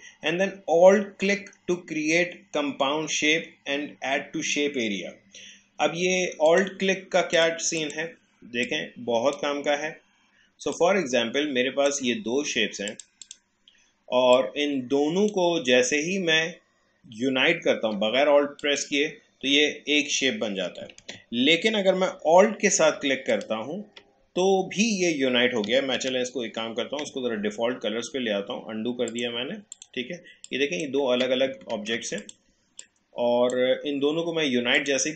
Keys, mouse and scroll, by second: 6.4 click, 8.6-17.9 shift+drag, 18.6 click, 21.0 ctrl+z, 23.3 alt+click, 26.0 ctrl+z, 29.1-31.8 drag, 31.8 ctrl+z, 32.2-35.1 drag.